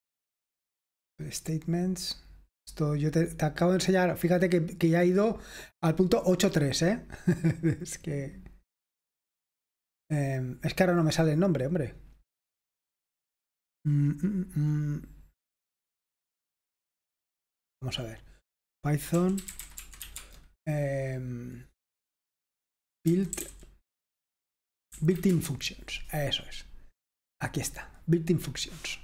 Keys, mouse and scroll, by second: 19.1-20.5 typing, 22.9-23.9 typing, 25.1 Down, 25.3 Return, 27.6-29.0 drag.